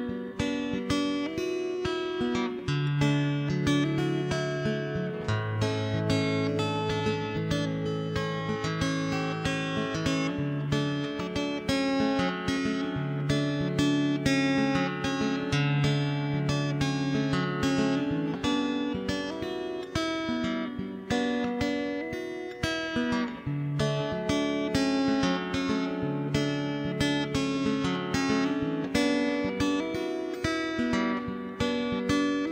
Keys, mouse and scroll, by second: 0.3 right click, 0.5 alt+c, 1.3 click, 2.1 KP_0, 2.5 ctrl+KP_3, 2.7 shift+space, 3.7 middle click, 4.0 shift+space, 4.7 KP_0, 5.2 z, 5.7 middle click, 6.8 ctrl+s, 8.3 right click, 8.6 alt+c, 9.4 ctrl+s, 9.7 shift+d, 10.2 m, 10.6 1, 10.8 right click, 11.0 alt+c, 11.4 right click, 12.2 ctrl+j, 12.4 middle click, 13.2 middle click, 13.7 ctrl+0, 13.9 middle click, 14.7 Tab, 14.9 a, 15.1 l, 15.3 h, 15.7 Tab, 15.9 shift+h, 17.1 Escape, 17.1 click, 17.3 Tab, 18.7 click, 19.3 ctrl+b, 20.0 middle click, 21.2 Tab, 21.4 middle click, 22.0 Tab, 22.3 alt+h, 22.5 a, 22.7 a, 23.0 l, 23.7 ctrl+i, 24.0 x, 24.6 Tab, 25.0 shift+space, 25.4 2, 25.6 right click, 25.9 x, 26.2 0, 26.4 right click, 28.1 Tab, 28.5 Tab, 28.8 shift+h, 28.9 Tab, 29.2 right click, 29.6 right click, 29.6 middle click, 30.0 scroll up 1, 30.0 middle click, 30.8 scroll up 1, 31.0 middle click, 31.5-32.0 scroll up 2, 32.0 middle click, 32.0 g, 32.4 middle click.